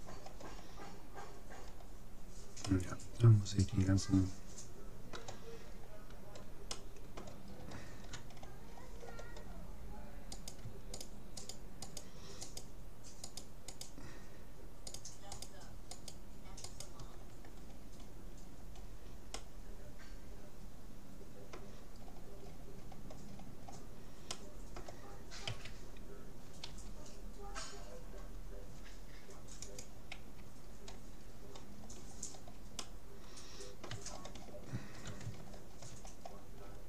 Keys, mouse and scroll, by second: 6.8-10.0 middle drag, 10.4-18.2 right drag, 17.8-21.0 middle drag, 22.0-22.8 scroll up 1, 24.4-26.0 middle drag, 25.6 a, 26.8 g, 30.2 a, 30.8-32.4 middle drag, 32.8-34.6 middle drag, 36.0-36.8 scroll down 1.